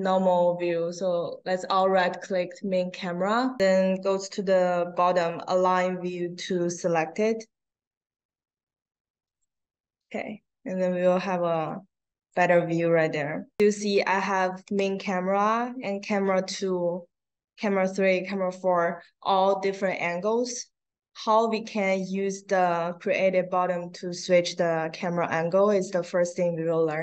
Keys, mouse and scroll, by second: 1.6 right click, 9.2 click, 11.6 click, 14.6 click, 15.4 click, 17.5 click, 18.1 click, 19.7-21.4 drag.